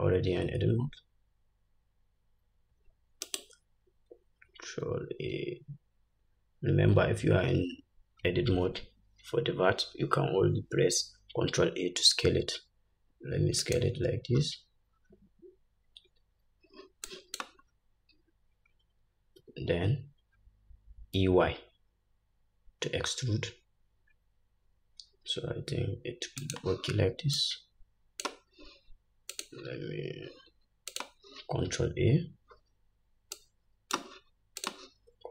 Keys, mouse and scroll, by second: 5.2 ctrl+a, 14.6 scroll up 1, 15.2-17.3 scroll down 1, 17.3-26.8 drag, 17.9-18.6 scroll down 1, 19.6 e, 27.6-29.6 drag, 31.2 click, 33.6-35.0 drag.